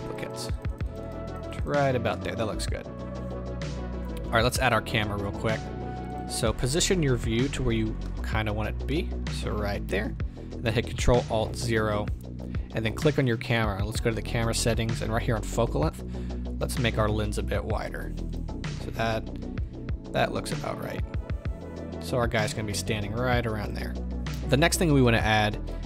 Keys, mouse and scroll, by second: 2.1-4.4 middle drag, 4.4 shift+a, 6.5 middle click, 8.1 shift+middle click, 8.4-8.9 scroll up 2, 8.9 middle click, 9.3-11.4 middle drag, 11.4 ctrl+alt+KP_0, 11.5-13.2 middle drag, 13.2 click, 14.1 click, 15.6-18.3 drag, 17.2 r, 19.6 g, 22.0 click, 23.0 g, 23.7 click, 24.2-25.1 scroll down 1.